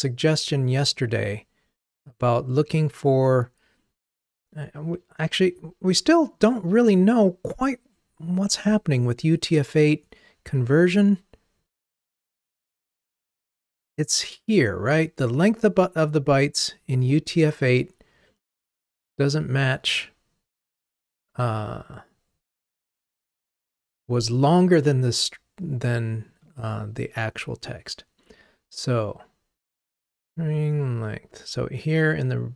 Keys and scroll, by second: 9.2 ctrl+Tab.